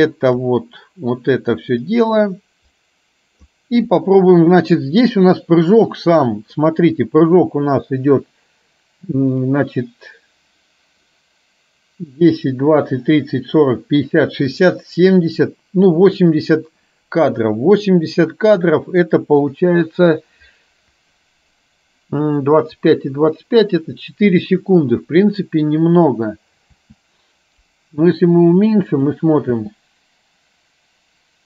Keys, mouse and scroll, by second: 1.9-3.5 drag, 29.7 space.